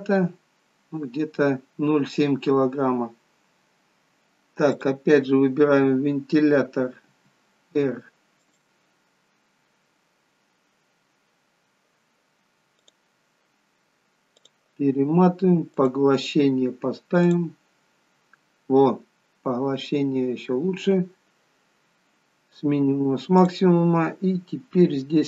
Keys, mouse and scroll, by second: 4.8 click, 7.1 r, 12.8 click, 14.4 click, 20.5-23.6 scroll down 2, 23.6 click, 23.6-23.9 scroll down 3, 25.0-25.2 scroll down 1.